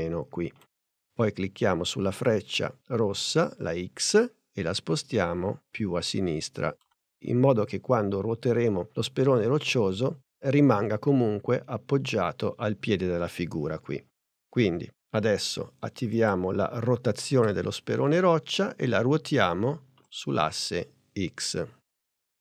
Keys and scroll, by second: 17.4 r.